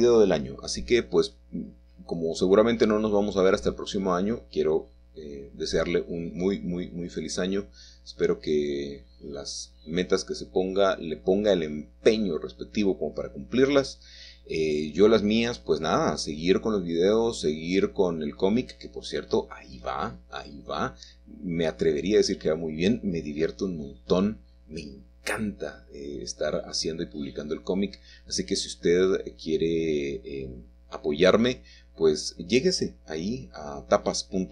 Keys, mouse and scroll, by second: 0.1 shift+middle click, 0.3 shift+click, 1.0 shift+middle click, 1.1 shift+click, 2.3-3.8 shift+drag, 2.3 shift+middle click, 3.0 shift+middle click, 4.2-6.0 shift+drag, 4.2 shift+middle click, 5.0 shift+middle click, 6.2 shift+middle click, 6.3 shift+click, 7.0 shift+middle click, 7.1 shift+click, 16.7 shift+middle click, 17.8 shift+click, 19.3-22.0 shift+drag, 21.3 middle click, 22.8 shift+click, 24.2 shift+click, 25.4 shift+click, 26.5 shift+click, 27.5 shift+click, 28.6 shift+click, 29.8 shift+click, 30.7 shift+click, 31.6-33.2 middle drag.